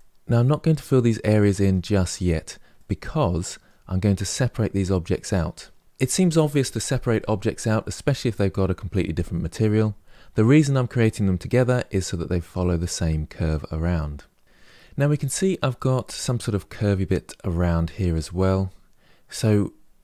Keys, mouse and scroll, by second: 10.1-13.1 middle drag, 13.7 middle click, 15.0-18.0 middle drag, 19.1-20.0 middle drag.